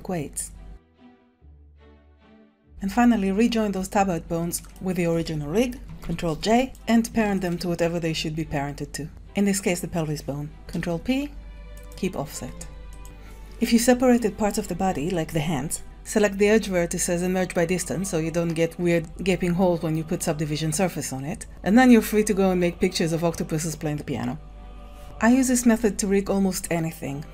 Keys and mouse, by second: 0.9 click, 1.1 ctrl+Tab, 1.5 ctrl+Tab, 1.6 click, 1.8-3.0 typing, 2.0 click, 3.1 alt+r, 4.6 shift+click, 6.0 ctrl+j, 6.6 Tab, 6.6 click, 7.3 shift+click, 10.4 ctrl+p, 12.5 Tab.